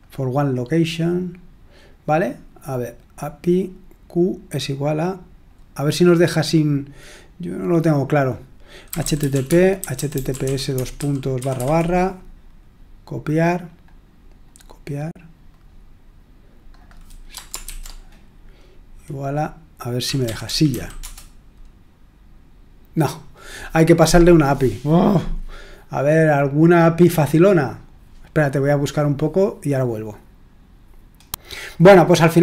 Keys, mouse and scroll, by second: 2.5-6.6 drag, 8.6-11.5 typing, 13.4-14.8 drag, 14.8 right click, 14.9 click, 15.5 click, 16.7 click, 17.6 ctrl+v, 19.7-21.1 typing, 26.6-28.1 drag, 31.1-32.4 drag.